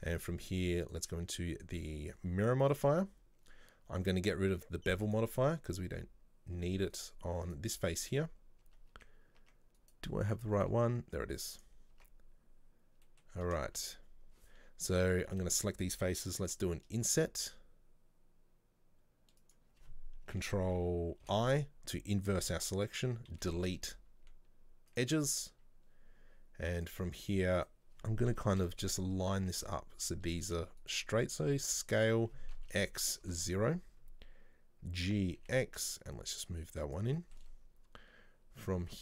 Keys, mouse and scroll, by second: 0.3 click, 0.9-3.9 drag, 5.2 click, 5.5-6.1 scroll up 2, 6.4 scroll up 2, 6.6 scroll down 2, 6.8 Tab, 7.0 right click, 7.6 right click, 8.0 Tab, 8.7 Tab, 9.9 right click, 10.3 right click, 10.6 right click, 10.9 z, 12.0 Tab, 13.1 middle click, 13.5 scroll up 2, 13.8 shift+middle click, 13.9-15.4 scroll down 1, 15.4 a, 23.4 Delete, 26.9 click, 27.6 right click, 28.7 KP_7, 29.5-30.9 shift+middle drag, 30.9 shift+right click, 31.7 s, 37.3-39.0 shift+middle drag.